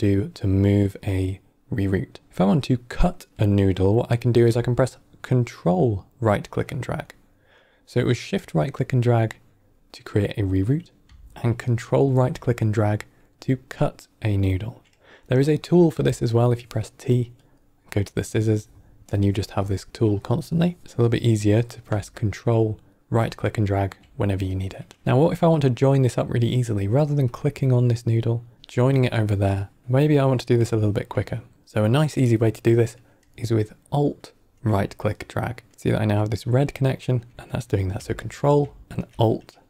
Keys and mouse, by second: 5.7-6.3 ctrl+right drag, 8.3-9.2 drag, 11.6-12.0 ctrl+right drag, 15.5 middle click, 15.8 t, 17.3 click, 19.0-20.2 drag, 20.8 click, 20.8 t, 22.9-23.7 ctrl+right drag, 27.2-28.5 drag, 30.7 ctrl+right click, 35.1-36.9 alt+right drag, 38.1 ctrl+right click, 38.8 alt+right click.